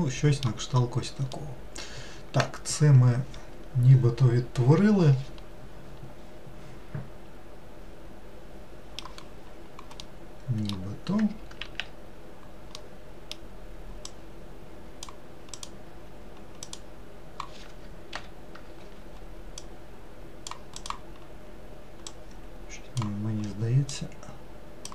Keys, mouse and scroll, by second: 0.8-1.4 scroll down 1, 1.4-4.4 middle drag, 10.1-11.7 middle drag, 11.7 alt+z, 12.8-14.2 middle drag, 14.2-15.7 drag, 16.7 click, 18.2 ctrl+l, 19.7 click, 20.9 click, 24.0 click.